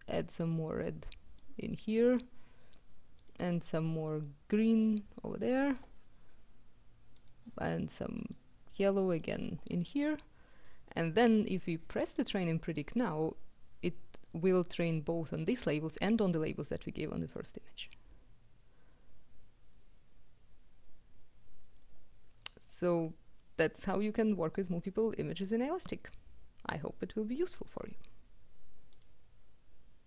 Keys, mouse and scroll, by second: 1.4-2.7 drag, 3.2 click, 4.7-6.0 drag, 7.2 click, 8.4-9.7 drag, 12.1 click, 28.5-29.6 drag.